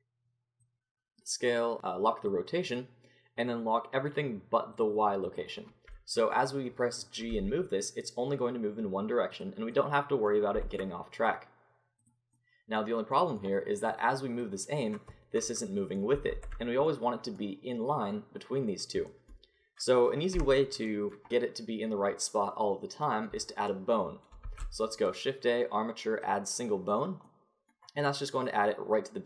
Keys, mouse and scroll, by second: 0.6-6.0 drag, 6.0-7.8 middle drag, 7.3 g, 9.8-14.4 drag, 12.3 g, 14.4-15.5 middle drag, 15.5 click, 16.3 ctrl+z, 20.3 n, 24.4 shift+a.